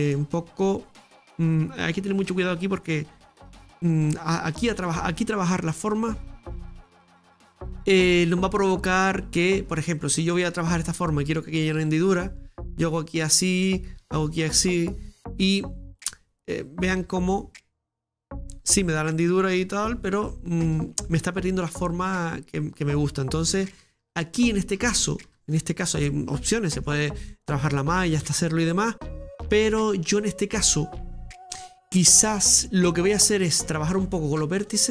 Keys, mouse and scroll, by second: 0.2-7.0 scroll up 2, 7.0-8.1 scroll down 2, 8.1 scroll down 4, 8.1-9.6 middle drag, 9.6-11.8 scroll up 5, 10.2-11.8 middle drag, 11.8 ctrl+r, 14.0 ctrl+r, 16.0 ctrl+r, 16.0 right click, 16.8 shift+right click, 17.4 click, 18.0 click, 18.8-19.6 scroll down 2, 19.7 Tab, 20.1 middle click, 20.8 right click, 21.1-23.7 middle drag, 23.7 ctrl+z, 24.0 ctrl+z, 26.3-28.6 middle drag, 28.6-29.0 scroll up 2, 29.0-30.4 middle drag, 30.4-30.7 scroll down 1, 30.7-34.7 middle drag, 34.7 click.